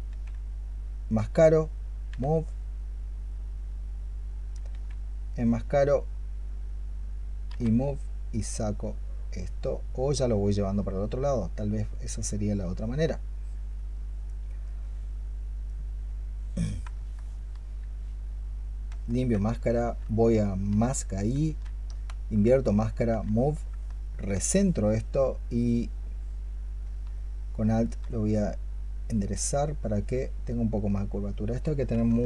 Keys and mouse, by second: 1.9 w, 4.5 q, 7.3 w, 16.8 alt+click, 17.2 alt+click, 18.9 ctrl+click, 21.3 q, 22.0 ctrl+click, 22.9 w, 24.2 alt+click, 26.8 alt+click, 32.1 alt+click.